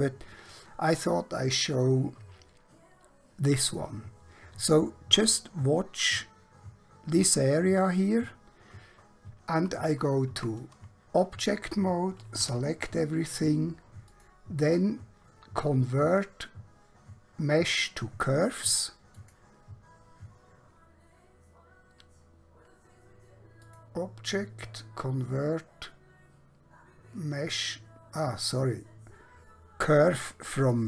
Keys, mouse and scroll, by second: 10.4 Tab, 12.5 a, 14.2 click, 19.1 click, 23.7 click, 30.6 click.